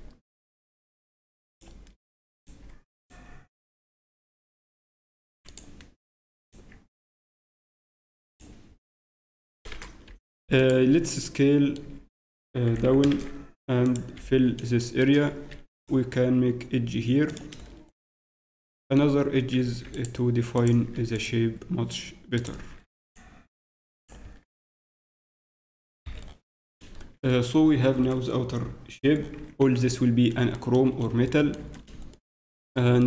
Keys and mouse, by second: 1.6 click, 5.4 g, 8.8 g, 9.3 e, 11.8 z, 12.7 e, 14.1 f, 14.4-16.9 middle drag, 17.9-20.7 ctrl+middle drag, 20.9 ctrl+2, 24.2 ctrl+Tab, 29.3 z, 32.6-33.0 middle drag.